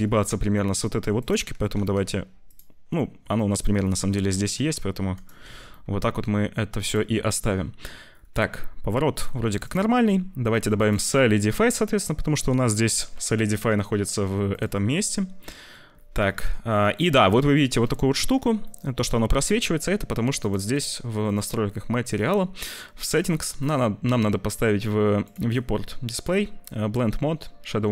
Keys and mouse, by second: 1.2 click, 1.7 g, 2.9 middle click, 3.9 middle click, 4.4 g, 5.4 ctrl+s, 5.7 middle click, 9.2 click, 9.5 click, 10.4 click, 10.7-14.5 drag, 15.5 click, 16.3 shift+middle click, 17.8 shift+middle click, 18.6 middle click, 20.3 click, 20.6 click, 21.2 click, 22.9 click, 25.2 click.